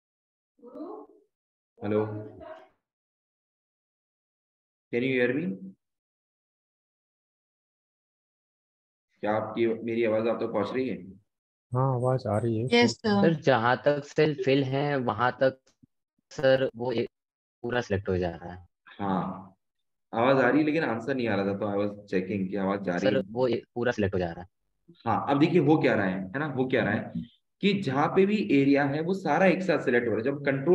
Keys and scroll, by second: 1.4 ctrl+Up, 2.3 ctrl+Up, 3.1 Up, 4.1 Down, 5.1 ctrl+shift+Down, 5.5 ctrl+shift+Down, 6.1 ctrl+shift+Right, 8.5 ctrl+shift+Up, 9.1 ctrl+shift+Up, 9.4 ctrl+shift+Up, 10.2 ctrl+shift+Up, 10.6 ctrl+shift+Down, 10.9 ctrl+shift+Down, 11.2 ctrl+shift+Down, 11.5 ctrl+shift+Down, 26.2 Up, 27.4 ctrl+shift+Down, 28.0 ctrl+shift+Right, 28.8 ctrl+shift+Down.